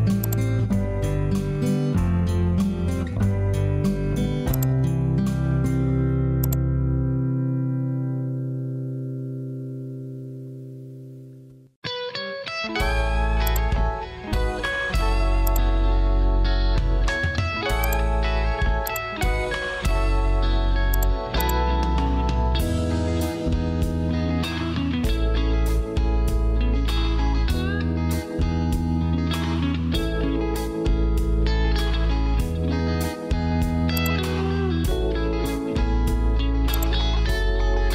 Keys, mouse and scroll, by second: 2.7 Return, 29.8 Escape, 32.9 Escape.